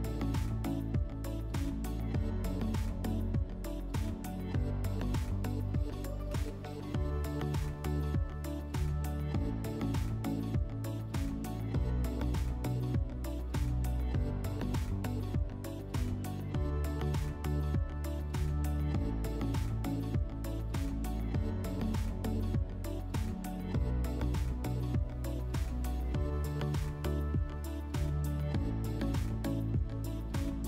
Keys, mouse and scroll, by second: 0.0-3.0 drag, 2.3-4.3 typing, 15.3-16.6 drag, 17.5 alt+click, 29.0-30.2 drag.